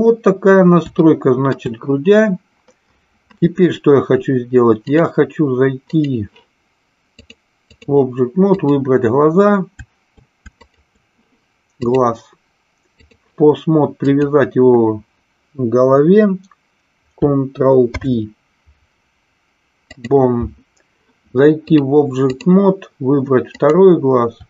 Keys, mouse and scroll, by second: 1.1-1.6 shift+middle drag, 4.9 click, 5.9 click, 7.2-7.8 drag, 8.4 click, 10.6 shift+click, 11.8-13.2 drag, 13.9 click, 17.9 ctrl+p, 21.8-22.3 drag, 23.4 click.